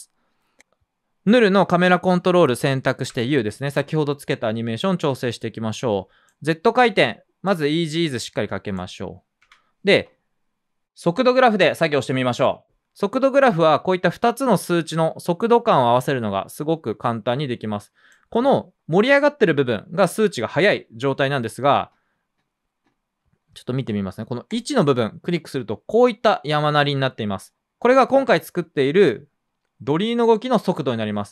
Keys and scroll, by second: 3.0 u, 9.4 F9.